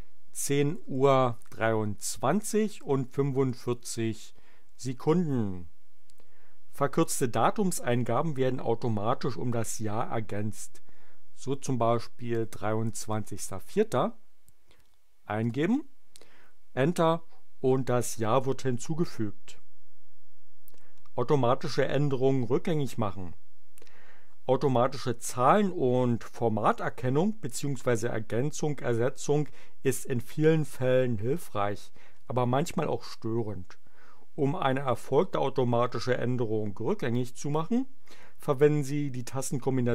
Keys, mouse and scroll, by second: 0.0-1.4 typing, 2.6-3.7 typing, 12.2-13.9 typing, 15.4 Return.